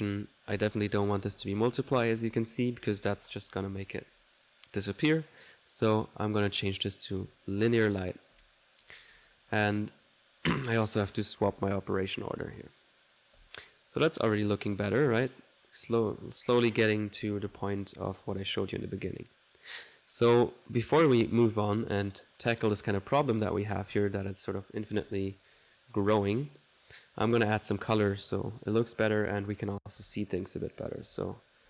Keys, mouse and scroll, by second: 2.9-4.1 typing, 5.9 click, 7.3 click, 7.5-8.2 typing, 11.5 click, 11.5 typing, 16.0 typing, 21.7 middle click, 22.7 click, 26.3 click, 28.7 middle click, 30.0 n.